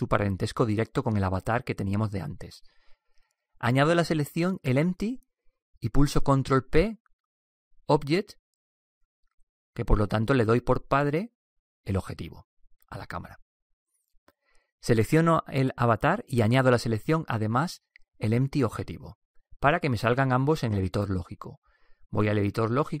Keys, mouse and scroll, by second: 6.0-9.9 right drag, 7.2 ctrl+p, 16.4-23.0 right drag.